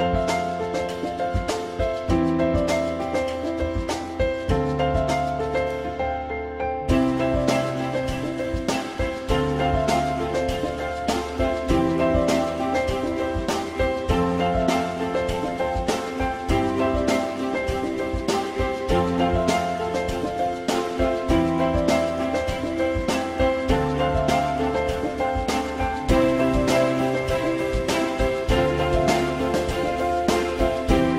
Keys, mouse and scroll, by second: 2.3 alt+middle click, 9.4 shift+click, 10.6 ctrl+BackSpace, 14.7 ctrl+click, 17.2 x, 17.6 x, 18.5 x, 27.1 click.